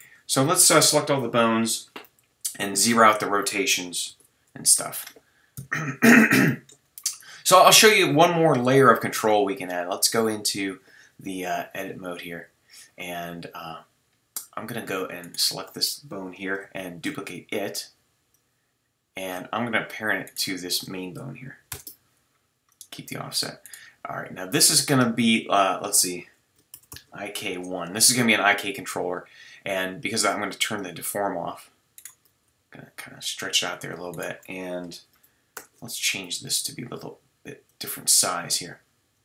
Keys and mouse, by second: 0.0 a, 2.1 alt+r, 4.1 alt+g, 4.7-5.2 drag, 6.4 KP_3, 9.1 Tab, 16.9 shift+d, 21.7 ctrl+p, 32.5 g, 35.5 ctrl+alt+s, 38.1 g.